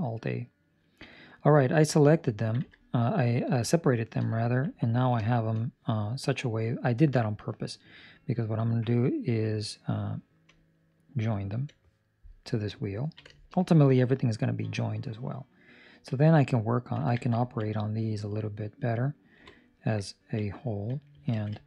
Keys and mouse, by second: 1.1 middle click, 2.5 Tab, 3.1 right click, 3.9 shift+right click, 4.3 ctrl+middle click, 4.7 middle click, 5.2 shift+middle click, 5.6 middle click, 11.4 ctrl+j, 12.1 right click, 12.9 ctrl+middle click, 13.2 shift+middle click, 17.4 ctrl+middle click, 17.6 middle click, 19.3 KP_7, 20.0 ctrl+middle click, 21.3 alt+a.